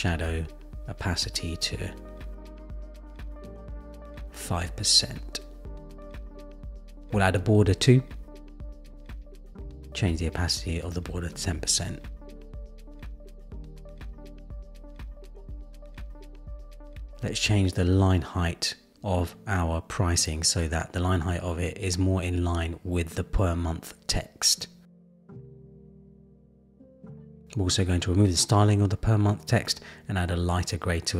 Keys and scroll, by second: 6.5 Return, 11.2 Return, 13.6 Return, 22.7 Down.